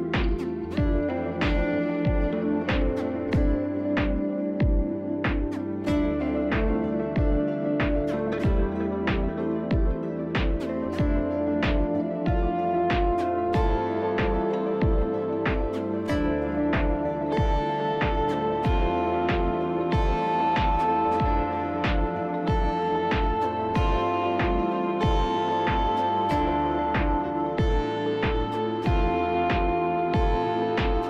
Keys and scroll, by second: 0.0-3.9 typing, 5.1-7.0 typing.